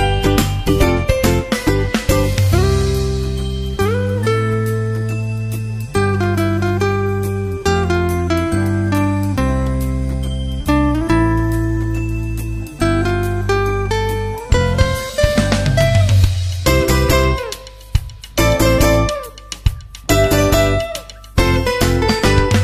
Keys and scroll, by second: 7.1 super+Right, 7.4 super+s, 7.6 super+Tab, 7.8 super+Right, 7.8 super+s, 7.8 super+Tab, 9.3 super+Tab.